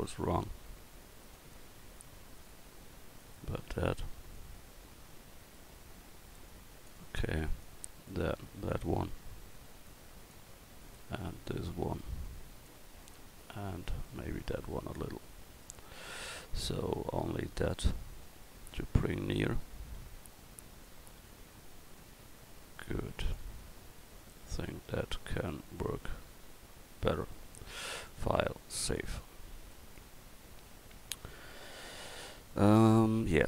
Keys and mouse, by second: 0.2 ctrl+z, 1.2-4.4 right drag, 4.4-6.9 middle drag, 7.6-8.7 right drag, 8.7-10.3 middle drag, 10.3-11.5 right drag, 11.5-12.7 middle drag, 12.7 right click, 13.0-14.4 middle drag, 17.6-20.8 right drag, 25.5-26.3 middle drag, 26.4 middle drag, 28.1-31.5 drag, 31.5 KP_1.